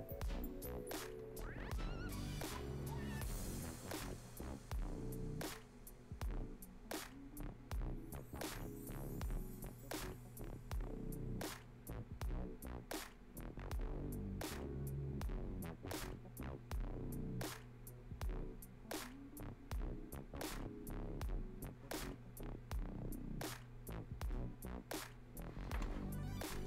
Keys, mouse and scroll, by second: 21.9 scroll down 1, 24.7-26.0 scroll down 1, 26.0-26.6 scroll down 1, 26.6 scroll up 1.